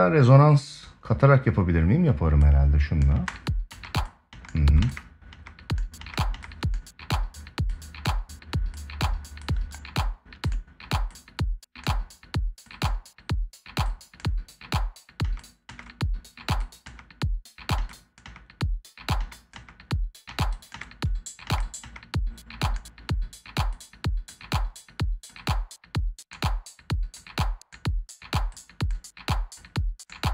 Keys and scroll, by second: 2.9 space, 14.9 space.